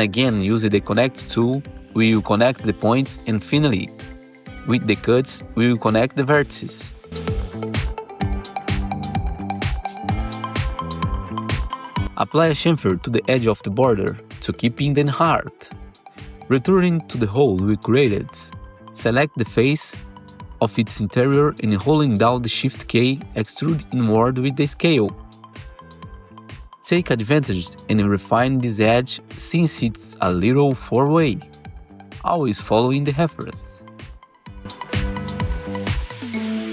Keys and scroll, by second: 2.1 ctrl+shift+e, 3.3 ctrl+shift+e, 4.6 ctrl+shift+e, 5.5 ctrl+shift+e, 6.6 ctrl+shift+e, 7.6 ctrl+shift+e, 9.4 ctrl+shift+e, 9.9 alt+c, 11.9 2, 15.3 ctrl+shift+c, 17.9 2, 18.0 F4, 19.2 F4, 20.8 4, 22.1-23.0 typing, 23.2 alt+x, 23.7 alt+x, 24.6 r, 26.8-28.3 typing.